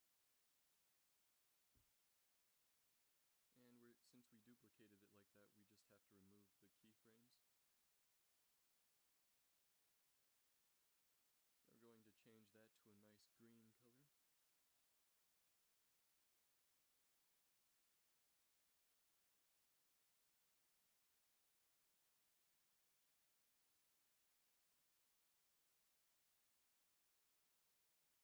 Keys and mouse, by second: 2.2 a, 3.3-5.1 drag, 5.1 a, 5.3 a, 5.5 b, 7.5 x, 19.7 ctrl+s, 24.9 n, 25.3 n.